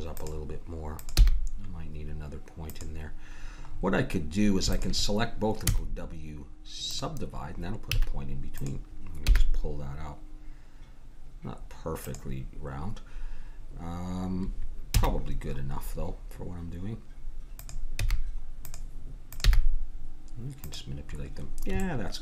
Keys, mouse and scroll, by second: 1.0-2.6 drag, 1.1 g, 4.7-6.5 drag, 5.6 w, 7.9 a, 8.5-10.4 drag, 9.2 g, 14.9 a, 15.2-17.6 middle drag, 17.9 g, 18.3 click, 19.4-21.0 drag, 19.4 g, 21.3 middle click.